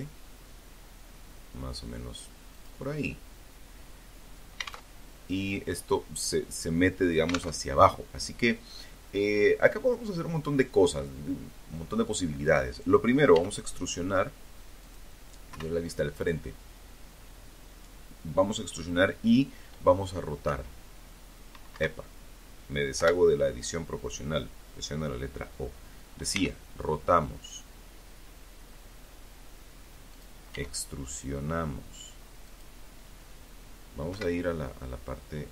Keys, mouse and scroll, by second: 0.7 click, 1.0-2.7 middle drag, 3.1 alt+Tab, 5.8 alt+Tab, 7.1-11.2 middle drag, 11.5 e, 13.0 click, 13.7 KP_1, 18.6 r, 19.9 Escape, 21.1 o, 24.5 r, 28.3 click, 28.7 e, 30.6 click, 32.2 KP_7.